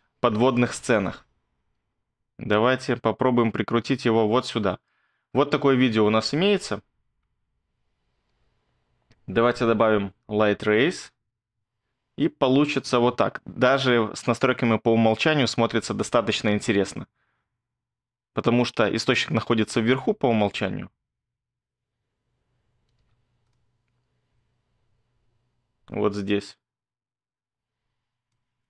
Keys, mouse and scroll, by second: 5.5 space, 8.3 space, 15.4 space, 20.6 click, 20.7-21.2 scroll down 3, 21.2 click, 21.3-23.0 scroll up 8, 23.0-23.5 scroll up 1, 23.0 space, 23.5-24.3 scroll, 24.3 click, 24.3 click, 24.4 click, 24.7 click, 25.1 click.